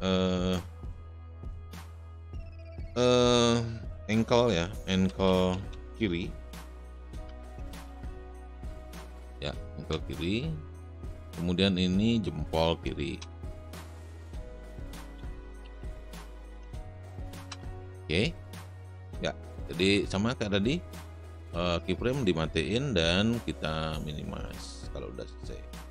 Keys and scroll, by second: 4.5-6.0 typing, 7.4-8.7 typing, 9.8 Return, 13.4 Return, 14.5-17.4 typing.